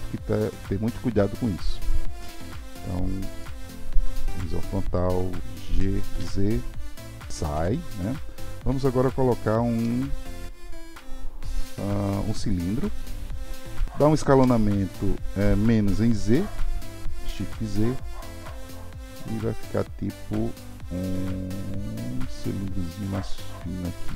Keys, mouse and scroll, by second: 3.4 middle click, 4.3 KP_1, 5.7 g, 7.6 Tab, 9.8 shift+a.